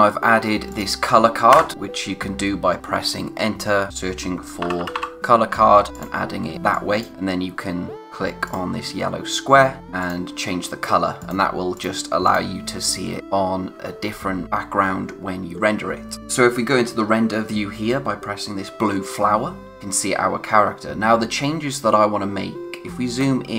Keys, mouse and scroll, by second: 1.5 Return, 4.2-5.4 typing, 5.9 click, 8.4 click, 10.0 click, 15.4-15.9 scroll down 1, 22.8-23.5 scroll up 1.